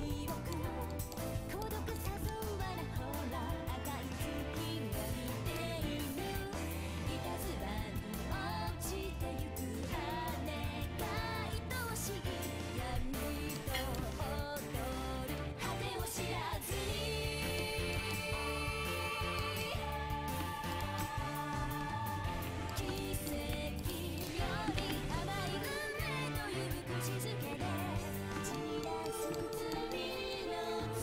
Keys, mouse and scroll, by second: 0.1 a, 5.0-8.1 right drag, 6.3-8.2 drag, 12.9-14.3 middle drag, 14.6 click, 14.6-16.6 middle drag, 16.6-18.2 drag, 16.9-18.2 middle drag, 19.3 middle click, 19.3 right click, 20.0-22.4 drag, 22.4 ctrl+x, 22.7-25.3 drag, 24.4 ctrl+x, 24.8 a, 25.0 ctrl+t, 25.3 a, 28.2 click, 29.1-30.2 right drag.